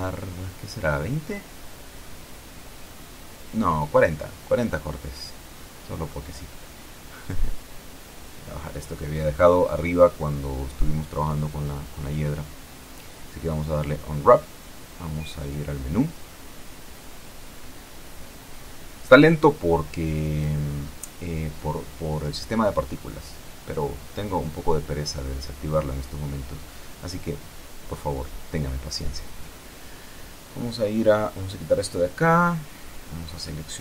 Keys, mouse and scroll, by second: 1.0 click, 2.1 KP_2, 2.2 KP_0, 2.5 KP_Enter, 4.1 click, 5.0 KP_4, 5.2 KP_0, 5.4 KP_Enter, 7.6-10.2 drag, 12.3 u, 14.2 click, 16.7-19.1 drag, 19.8 t, 24.6 click, 27.0 click, 31.8 click.